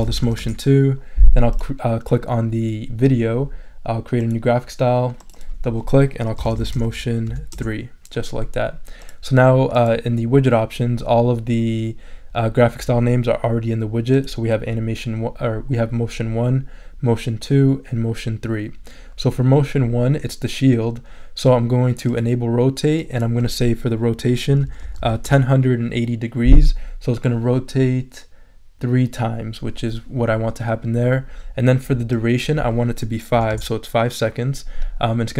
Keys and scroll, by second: 0.0-0.7 typing, 6.1-7.7 typing, 24.3-25.5 typing, 33.3 5, 33.5 Return.